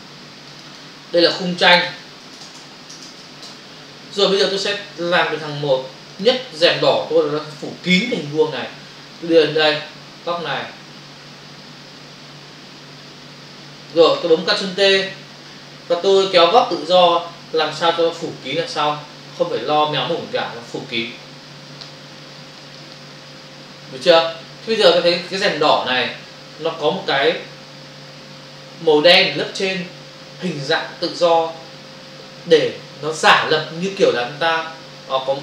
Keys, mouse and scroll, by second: 0.5 click, 0.7 double click, 1.6-3.2 typing, 3.4 Return, 5.0 click, 6.1 click, 9.1 click, 17.0 click, 20.1 Return.